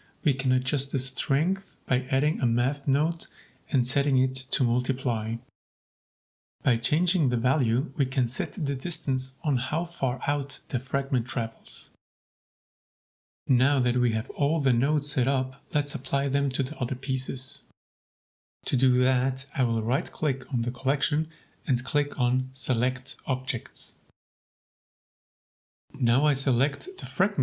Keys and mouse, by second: 4.4-5.5 drag, 6.6-8.5 drag, 9.6 g, 9.8 z, 12.9 click, 13.2 shift+middle click, 13.8 click, 15.7 alt+w, 19.3 click, 20.5 click, 21.9-25.8 drag, 26.7-27.1 middle drag.